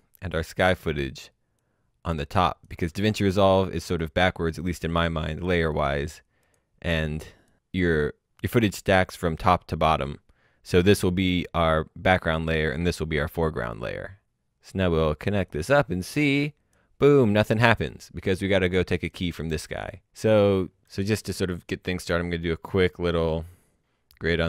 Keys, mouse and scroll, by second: 1.5 click, 15.5 click, 18.5 click, 23.0-24.4 scroll down 1.